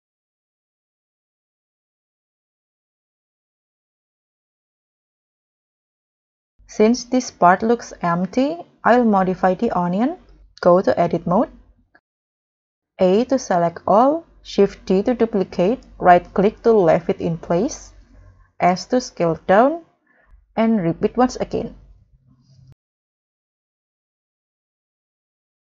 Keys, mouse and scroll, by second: 0.9-1.2 scroll down 2, 1.1 middle click, 1.7-2.1 scroll down 6, 2.4 scroll up 5, 2.9 middle click, 3.5-4.1 scroll down 4, 4.1-4.6 scroll up 6, 4.6 middle click, 7.6 scroll up 1, 7.8 middle click, 8.4 scroll up 1, 12.8 a, 14.6 shift+d, 15.6 right click, 17.2 s, 21.4 right click, 22.7 s.